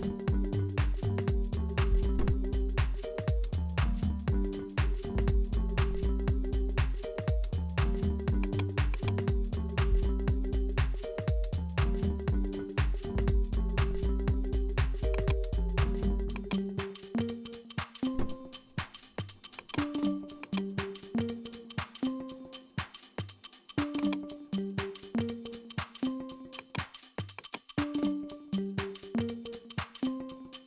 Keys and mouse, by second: 0.0-2.4 drag, 4.5-10.7 drag, 11.3-19.7 drag, 19.9-23.6 drag, 23.9-30.6 drag.